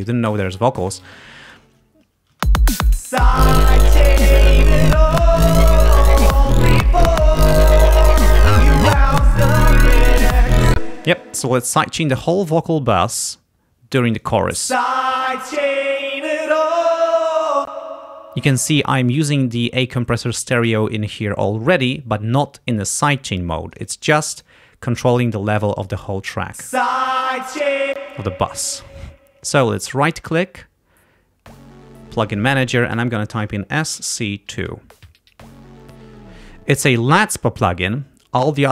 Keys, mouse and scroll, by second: 1.5 ctrl+click, 1.9 ctrl+scroll up 1, 2.4 ctrl+space, 4.0 scroll up 2, 10.7 space, 11.6 click, 14.2 click, 14.5 space, 15.6 click, 17.7 space, 23.6 click, 24.3 click, 26.5 space, 28.0 space, 28.8 click, 30.0 shift+right click, 31.8 click, 33.5 shift+s, 34.0 shift+c, 35.5 2.